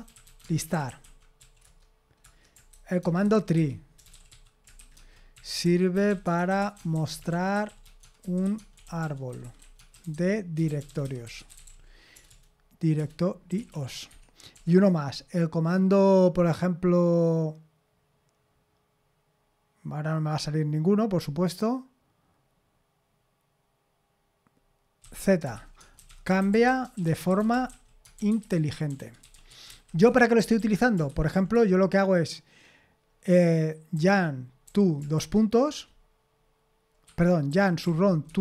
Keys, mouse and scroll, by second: 0.0-15.0 typing, 25.0-31.8 typing, 33.9-35.1 typing, 37.0 Escape, 37.2-38.4 typing.